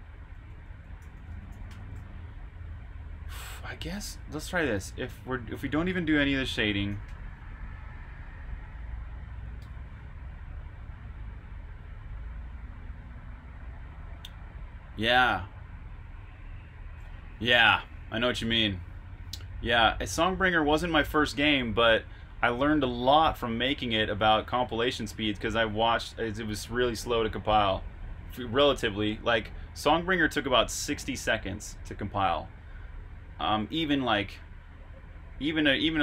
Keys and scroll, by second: 0.0-2.7 typing, 9.1-10.7 typing, 9.6 super+b.